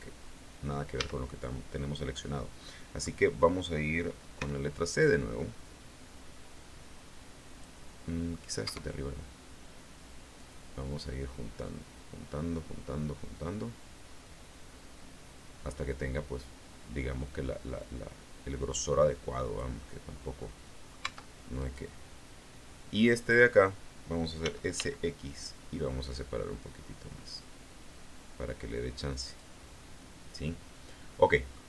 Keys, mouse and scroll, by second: 0.9 a, 4.3 c, 4.8-7.7 drag, 8.0 middle click, 8.6 Escape, 10.3-19.7 drag, 20.3 middle click, 21.0 Tab, 21.5 right click, 24.3 s, 24.6 x, 29.1 click, 29.7-31.6 middle drag.